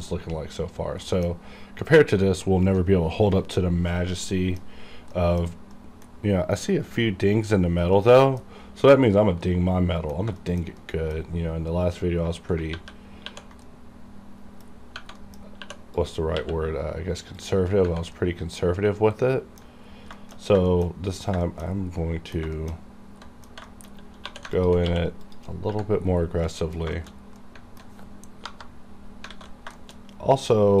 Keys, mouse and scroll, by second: 1.1 middle click, 4.0 scroll up 1, 4.3 middle click, 4.7-5.2 scroll up 1, 5.2 middle click, 8.0-9.5 middle drag, 9.5 middle click, 10.4 shift+middle click, 10.4 shift+middle click, 10.8 middle click, 11.4-11.9 scroll up 1, 12.7 ctrl+1, 13.6 ctrl+2, 13.6 middle click, 13.7 middle click, 14.7 scroll up 1, 15.2 middle click, 15.4 scroll up 1, 15.6 2, 16.0 click, 16.0 click, 16.4 q, 17.4 click, 17.4 click, 18.2-19.7 middle drag, 19.7 alt+scroll down 2, 20.2 shift+middle click, 20.3 shift+scroll down 1, 20.7 shift+middle click, 21.3 shift+middle click, 22.0 middle click, 22.3 scroll down 2, 22.6 shift+middle click, 22.8-23.3 scroll up 2, 23.3 middle click, 23.5 Tab, 23.7 shift+middle click, 23.9 shift+scroll up 2, 24.3 2, 24.5 alt+click, 24.6 alt+click, 25.2 click, 26.2 scroll down 1, 26.4 middle click, 26.8-27.2 scroll down 2, 27.0 shift+middle click, 27.4 middle click, 28.5 KP_Divide, 29.1 scroll down 1, 29.3 alt+a, 29.8 shift+middle click, 30.3-30.8 scroll up 1.